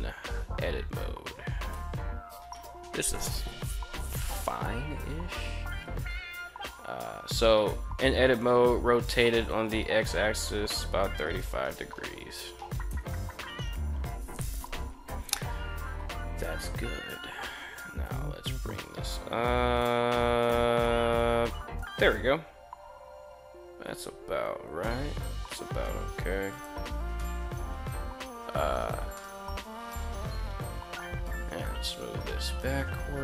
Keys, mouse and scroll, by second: 0.3 Tab, 1.4 Tab, 7.1 Tab, 8.0 r, 8.9 x, 10.2 3, 10.5 5, 12.3 Return, 16.5 Tab, 17.5 g, 17.8 z, 26.0 click, 26.7-27.2 shift+middle drag, 28.6-29.2 middle drag, 29.8 KP_3, 31.0 g, 31.4 y.